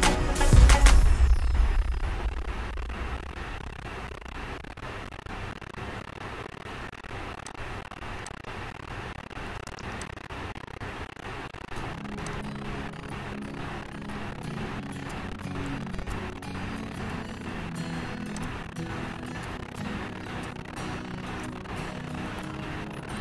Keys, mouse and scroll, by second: 4.4 click, 7.8 click, 8.6 click, 10.5 scroll, 11.5 click, 12.6 click, 17.6 click, 21.6-23.2 drag.